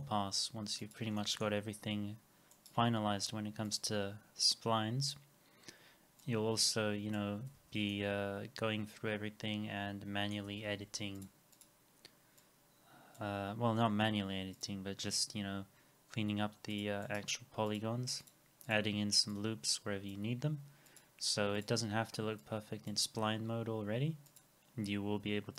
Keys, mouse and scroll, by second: 1.2 alt+middle click, 2.5 right click, 7.6 alt+x, 7.9 alt+middle click, 10.7 alt+middle click, 11.6 double click, 17.0 right click, 18.7 double click.